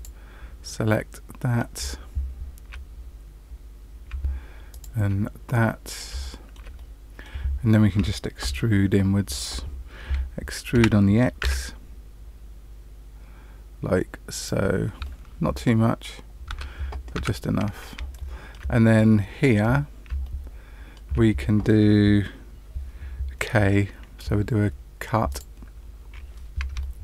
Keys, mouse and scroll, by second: 0.9 middle click, 2.9-3.5 scroll down 4, 4.7 shift+click, 5.4 middle click, 6.2 shift+middle click, 6.7 middle click, 8.8-9.3 scroll up 1, 10.7 e, 15.0 middle click, 16.4 Tab, 17.1 Tab, 18.1 shift+middle click, 19.6-20.0 scroll up 1, 20.2 shift+middle click, 25.2 click, 25.9-26.3 scroll up 3, 26.7 shift+middle click.